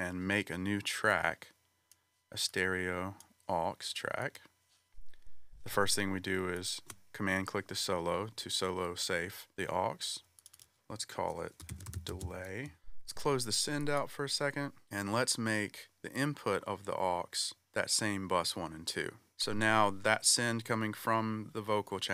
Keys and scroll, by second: 11.4-12.7 typing.